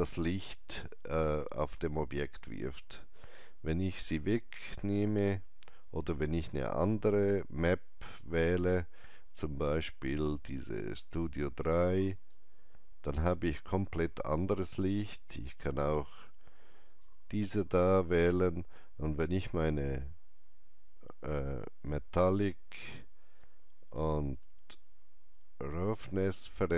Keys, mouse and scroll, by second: 8.0-10.6 drag, 8.0 alt+right click, 12.1 click, 12.1 alt+right click, 15.3 click, 19.7 click, 19.7 scroll down 1, 23.4-26.7 drag, 23.4 scroll down 1.